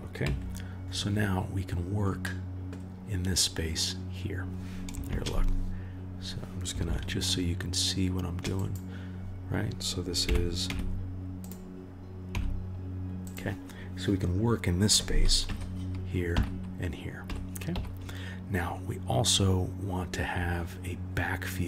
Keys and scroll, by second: 0.2 KP_1, 5.1 shift+a, 6.9 shift+a, 10.2 g, 12.3 s, 15.4 KP_1, 16.8 KP_3, 17.2 KP_1, 17.7 KP_3.